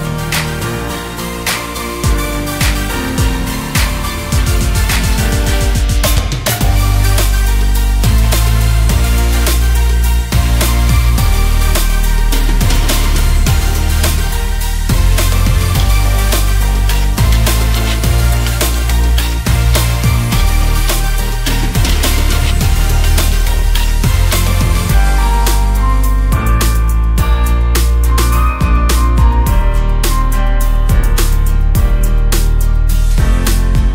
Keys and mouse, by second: 3.9 click, 6.2-7.7 drag, 8.3 click, 9.2 click, 10.6 click, 12.5-15.1 drag, 21.7-25.0 drag, 26.1-26.7 drag, 28.1-30.1 drag, 31.3 n.